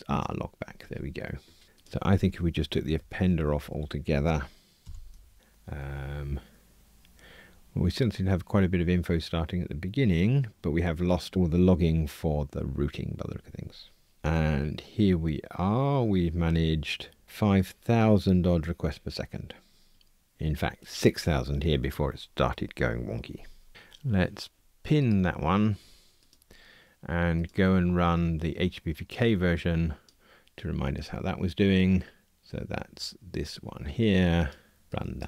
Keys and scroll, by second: 1.6 super+z, 4.8 super+/.